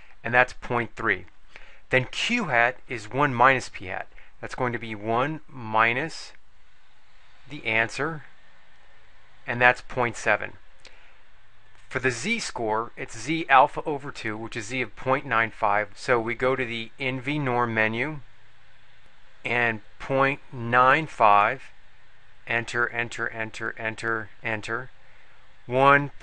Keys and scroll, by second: 5.0 1, 5.9 -, 8.3 Return, 18.5 3, 20.1 ., 20.8 9, 21.3 5, 22.6 Return, 23.1 Return, 23.7 Return, 23.8 Return, 24.3 Return.